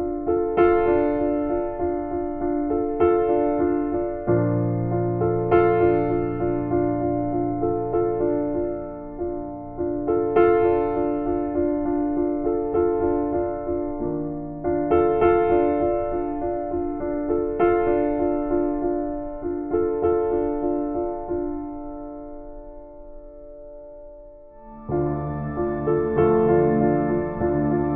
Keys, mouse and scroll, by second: 12.4 scroll down 1, 13.1 scroll up 1, 13.1 scroll down 1, 13.2-13.6 scroll up 1, 14.1 scroll down 1, 14.4 scroll up 1, 14.9-15.3 scroll down 1, 15.4 scroll up 1, 16.3-16.6 scroll up 1, 16.7 scroll down 1, 17.0 scroll up 1, 17.6-18.1 scroll down 1, 18.6-18.9 scroll down 1, 19.1-19.5 scroll up 1, 21.7-22.1 scroll up 1, 22.6 scroll down 1, 22.8-23.3 scroll up 1, 24.3-24.6 scroll down 1, 24.7 scroll up 1, 25.0 scroll down 1, 25.2 scroll up 1, 25.9 scroll down 1, 26.1 scroll up 1, 26.4 scroll down 1, 27.1-27.4 scroll up 2, 27.5-27.9 scroll down 1.